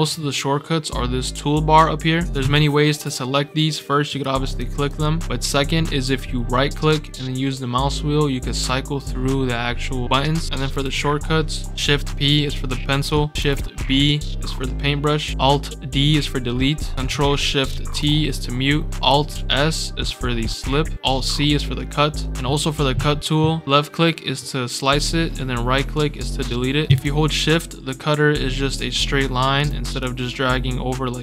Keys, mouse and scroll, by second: 4.0 click, 4.4 click, 4.8 click, 6.8-10.5 right drag, 10.7 ctrl+p, 12.1 scroll up 2, 12.3 scroll down 2, 12.7 scroll up 2, 12.9 scroll down 2, 17.7 ctrl+shift+t, 19.0 alt+s, 24.3-24.9 drag, 24.6 scroll down 1, 25.9-26.4 right drag, 27.0-29.5 shift+drag, 29.9-31.2 drag, 30.2 scroll down 2.